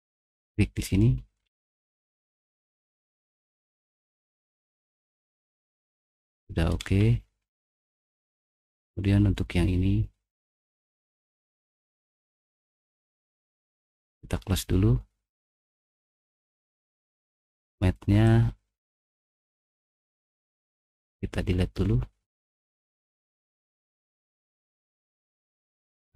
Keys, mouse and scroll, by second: 1.0 middle click, 1.4 middle click, 1.7 middle click, 1.7-2.3 scroll up 2, 2.2 middle click, 2.5-4.7 middle drag, 4.9-6.7 middle drag, 6.7-7.3 scroll down 2, 7.3-8.2 scroll up 3, 8.2-10.2 middle drag, 8.4 scroll down 1, 10.4 scroll down 1, 11.9 click, 13.8 click, 15.3 click, 16.9 click, 18.2 click, 18.8 right click, 22.3 click, 23.1 click, 24.3 click, 25.3 middle click, 25.3-25.8 scroll up 4, 25.7 middle click.